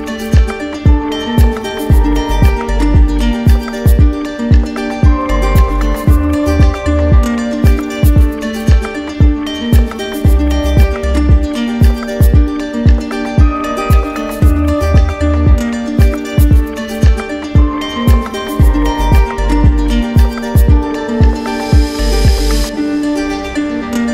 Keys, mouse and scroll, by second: 4.7-5.8 drag, 11.4 shift+click, 12.0 alt+click, 13.0 click, 13.7-14.9 alt+drag, 20.4-21.5 drag, 22.8-23.8 drag.